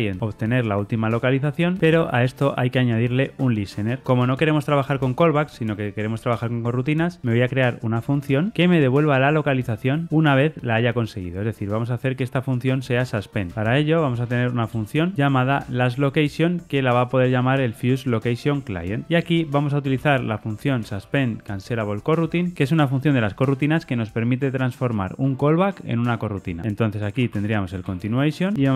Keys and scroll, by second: 14.6 Return, 15.5 Tab.